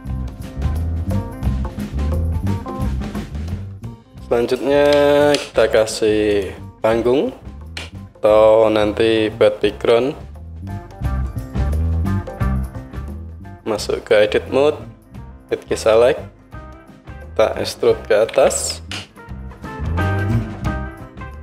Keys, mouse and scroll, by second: 0.0-0.3 drag, 0.3-6.4 middle drag, 2.1 KP_1, 6.5-15.8 middle drag, 6.5 shift+a, 7.8 s, 13.0 Tab, 15.8-17.0 drag, 17.0-21.4 middle drag, 18.4 e.